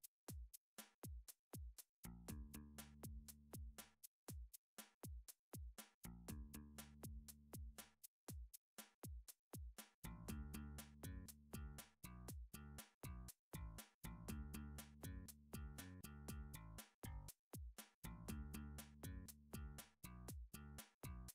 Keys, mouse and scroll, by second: 0.2 Tab, 0.2 middle click, 1.0 3, 1.4 click, 2.0 shift+click, 3.4 shift+click, 4.0 click, 4.4 shift+click, 6.4 x, 8.0 click, 8.7 shift+middle click, 9.6 middle click, 9.8 1, 10.7 middle click, 11.4 click, 12.5 middle click, 13.0 shift+click, 16.6 middle click, 17.1 f, 17.8 middle click, 18.2 click, 18.7 shift+click, 20.7 f.